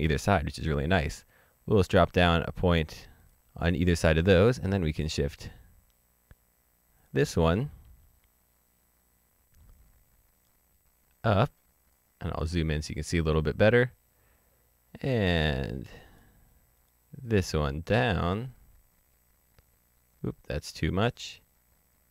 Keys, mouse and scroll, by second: 1.8 click, 3.7-5.2 scroll up 1, 6.9 click, 9.5 click, 12.4-14.5 scroll up 1, 15.4-16.9 scroll up 1, 16.9 click.